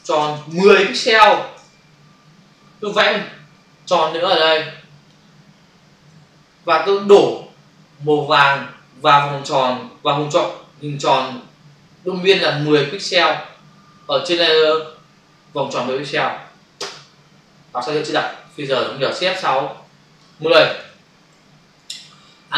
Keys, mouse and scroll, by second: 0.0-1.1 typing, 1.5 Return, 3.5 shift+click, 16.8 alt+BackSpace, 18.2 ctrl+alt+z, 19.6 shift+F6, 20.5 typing, 21.2 Return.